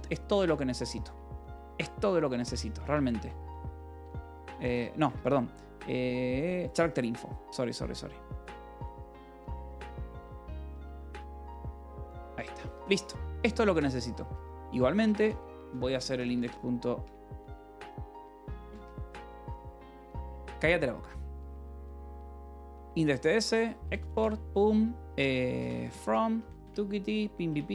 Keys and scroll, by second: 0.6 j, 1.0 h, 2.8-4.6 typing, 4.9 Escape, 5.8-16.9 typing, 8.9 Escape, 9.5 Escape, 12.4 ctrl+s, 18.5 t, 18.7 s, 19.2 Escape, 20.1 Return, 20.9 y, 22.3 Return, 22.6-24.1 typing, 25.2-26.9 typing, 27.4 Return.